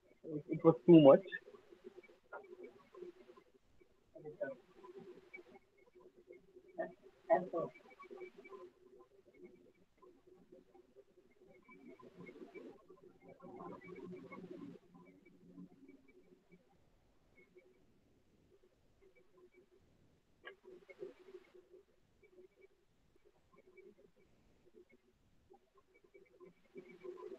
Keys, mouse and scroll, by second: 0.0 alt+middle click, 0.2 ctrl+z, 1.3 alt+middle click, 1.9 click, 2.5 alt+middle click, 3.7 click, 5.0 click, 6.2 alt+scroll, 6.8 alt+middle click, 7.6 alt+middle click, 8.2 alt+click, 8.9 alt+middle click, 10.1 click, 10.7 alt+middle click, 11.2 alt+click, 12.1 click, 12.8 alt+middle click, 13.2 alt+click, 14.8 click, 16.1 shift+click, 16.3 shift+right click, 16.8 alt+middle click, 18.3 click, 19.6 click, 20.2 alt+middle click, 21.7 click, 22.5 alt+middle click, 22.9 click, 23.3 click, 24.1 click, 24.7 alt+middle click, 25.8 click, 27.2 alt+click.